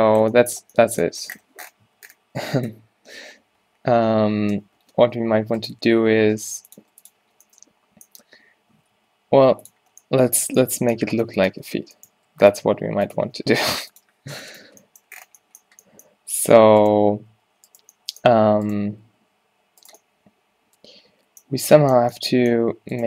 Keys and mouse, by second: 2.0 Tab, 3.2 z, 5.7 click, 6.0 s, 6.9 g, 7.4 z, 8.8 s, 11.6 z, 12.8 g, 12.8 r, 13.2 s, 14.9 z, 17.4 g, 19.1 g, 20.3 middle click.